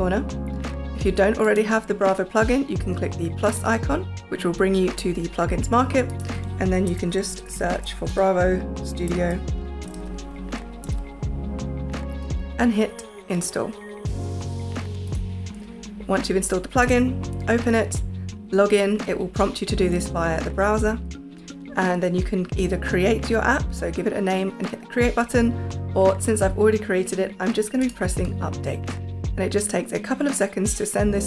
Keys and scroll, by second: 6.6-10.4 typing, 10.8 Return.